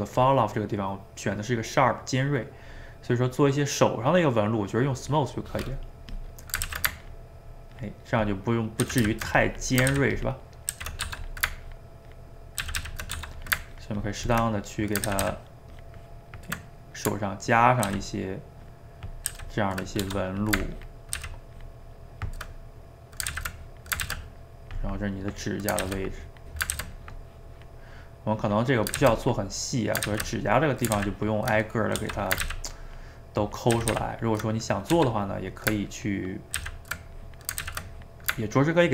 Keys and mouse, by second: 0.2-3.4 drag, 6.1 click, 6.7 ctrl+z, 7.1-8.9 ctrl+drag, 8.9 ctrl+z, 9.0 ctrl+z, 9.4 click, 9.9 ctrl+z, 10.2 ctrl+click, 10.7 ctrl+z, 11.1 f, 11.7 ctrl+click, 12.6 ctrl+z, 12.8 ctrl+z, 13.2 f, 13.8 ctrl+click, 14.5 middle click, 15.1 ctrl+z, 15.2 ctrl+z, 15.4-17.9 ctrl+drag, 17.9 ctrl+z, 18.6 ctrl+click, 19.3 ctrl+z, 20.0 f, 20.8 ctrl+click, 21.2 ctrl+z, 21.6-22.6 ctrl+drag, 22.6 middle click, 23.3 ctrl+z, 23.6 click, 24.0 ctrl+z, 24.2 click, 24.9 middle click, 25.4 click, 25.8 ctrl+z, 26.2 click, 26.7 ctrl+z, 27.0 click, 27.9 middle click, 28.4 click, 29.0 ctrl+z, 29.2 click, 30.1 ctrl+z, 30.4 click, 31.0 ctrl+z, 31.2 ctrl+click, 31.6 middle click, 32.0 f, 32.4 ctrl+z, 32.9 ctrl+click, 33.7 ctrl+z, 33.9 ctrl+z, 34.1 ctrl+click, 34.6 middle click, 35.0 f, 35.4 middle click, 35.9 ctrl+click, 36.6 ctrl+z, 37.2 click, 37.6 ctrl+z, 37.9-38.9 drag.